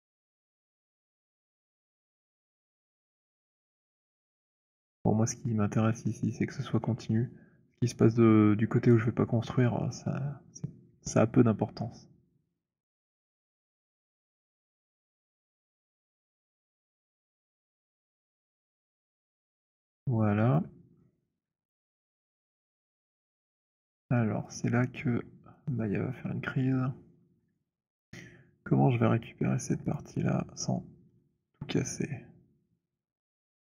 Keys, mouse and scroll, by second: 0.8 click, 1.6 click, 2.4 click, 2.9 middle click, 13.0 click, 17.0 click, 17.7 middle click, 18.0 middle click, 20.0 middle click, 20.5 alt+click, 21.2 alt+middle click, 22.0 alt+middle click, 23.8 right click, 24.5 click, 25.5 click, 27.5 click, 29.9 shift+click, 31.2 shift+click, 33.4 right click.